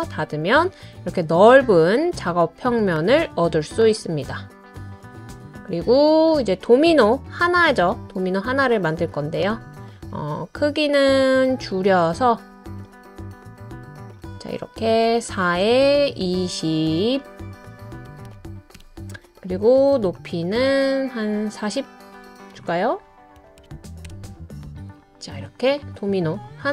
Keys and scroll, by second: 15.6 typing, 17.8-19.3 typing, 23.4-24.1 typing, 25.2-26.3 typing.